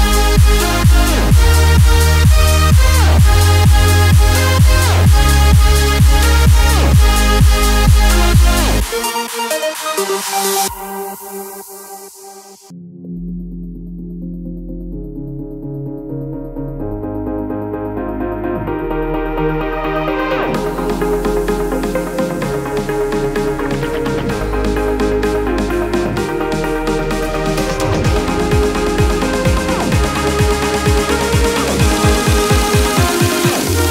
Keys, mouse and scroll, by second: 0.2 click, 0.6 space, 3.1 click, 4.5-8.0 drag, 8.2 click, 11.9 Return, 13.3 Return, 13.5 click, 14.7-17.6 scroll down 1, 17.6-20.1 drag, 23.7 click, 24.5-25.8 typing, 27.5 click, 30.1 click.